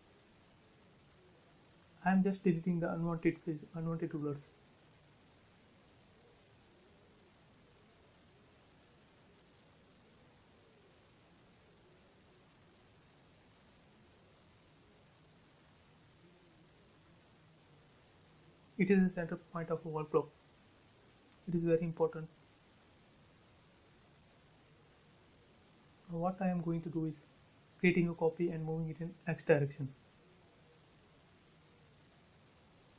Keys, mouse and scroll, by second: 2.2 e, 2.3 click, 3.9-4.5 scroll up 1, 4.5-6.2 drag, 6.2 ctrl+z, 7.4 click, 10.3 space, 10.6-11.1 scroll up 1, 11.7-13.4 shift+middle drag, 13.4-13.8 scroll up 3, 13.8 shift+middle click, 14.4 scroll up 1, 14.8-17.2 shift+middle drag, 17.2-18.8 scroll up 1, 19.6 r, 20.3 space, 22.0-22.7 scroll up 1, 22.7 scroll, 22.8 scroll down 1, 23.6 shift+middle click, 24.1 scroll down 1, 24.6-25.9 middle drag, 25.9 click, 28.6 shift+click, 30.5 scroll down 1, 30.7 m, 31.6 ctrl+click.